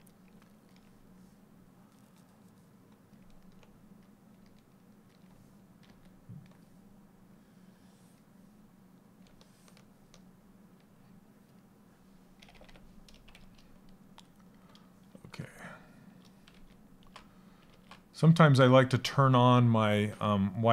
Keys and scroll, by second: 5.3 s, 11.9 ].